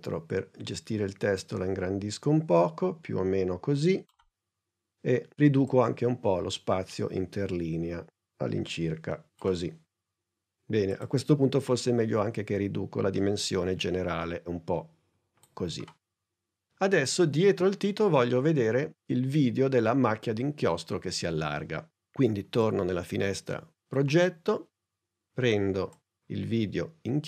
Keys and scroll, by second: 12.2 s.